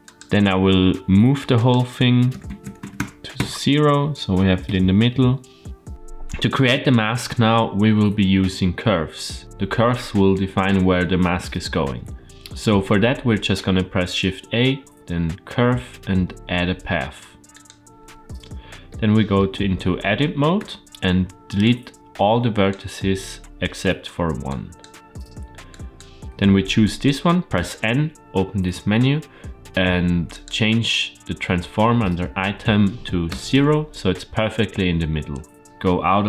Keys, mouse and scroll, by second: 0.1 click, 1.7-3.9 drag, 4.8 KP_Decimal, 5.9 middle click, 12.2 middle click, 12.5 shift+a, 18.7 middle click, 20.4 Tab, 21.5-22.5 drag, 23.7 x, 25.5 click, 27.4 n, 30.2-34.0 drag, 35.6 click, 35.6 middle click, 35.6-36.2 scroll down 1.